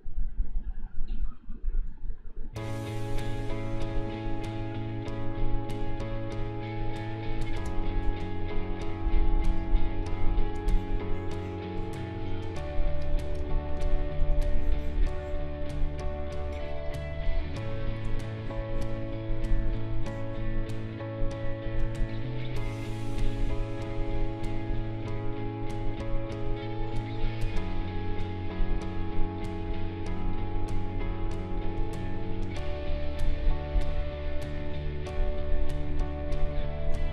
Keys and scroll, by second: 7.6 space, 13.3 space, 17.1 space.